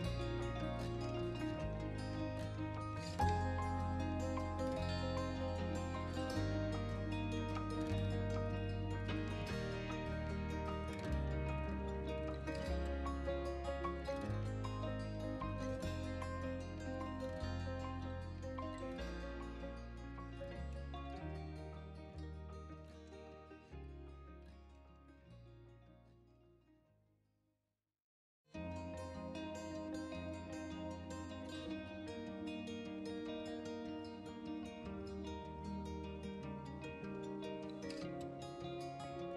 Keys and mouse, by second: 0.5-1.2 middle drag, 1.7 middle click, 2.9 shift+z, 3.8 Tab, 5.1 middle click, 5.9 middle click, 6.3 Tab, 7.0 g, 7.2 shift+z, 8.3 middle click, 8.8 middle click, 10.0 g, 10.7 shift+z, 11.8 drag, 12.0-12.9 middle drag, 13.1 middle click, 13.5 r, 13.7 z, 14.6 right drag, 14.8-15.6 middle drag, 16.1 middle click, 16.4 KP_1, 17.2 KP_3, 17.9-18.5 middle drag, 18.7 middle click, 19.7 middle click, 21.3 shift+d, 21.7 shift+z, 24.3 drag, 24.5 middle click, 25.1 KP_1, 25.8 r, 25.9 z, 27.1 click, 27.6 middle click, 28.6 g, 28.9 shift+z, 30.8 click, 31.2 middle click, 32.1 r, 32.2 x, 33.1 Escape, 33.4 middle drag, 33.8 r, 33.9 y, 35.0 right click, 35.4 r, 35.5 x, 37.6 right drag, 37.8-38.6 middle drag, 38.7 right drag, 39.0 middle click.